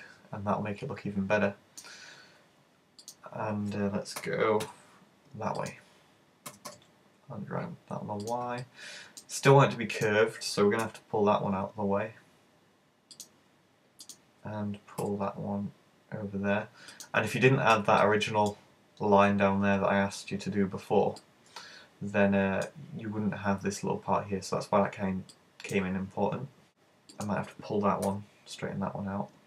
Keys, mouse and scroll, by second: 3.1 right click, 4.3 super+g, 5.7 click, 6.5 g, 8.4 click, 8.7 middle click, 10.0 right click, 10.8 super+g, 13.3 click, 14.1 right click, 15.0 super+g, 17.1 click, 17.5 right click, 18.0 middle click, 21.2 middle click, 25.3 middle click, 27.2 right click, 28.1 super+g.